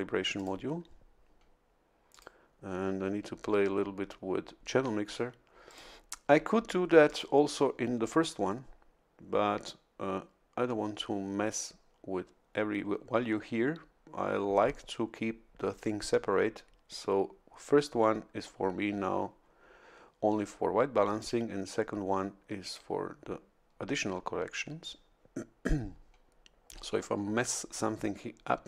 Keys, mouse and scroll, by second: 0.4 click, 2.1 click, 5.7 click, 7.1 click, 21.2 click, 22.6 click.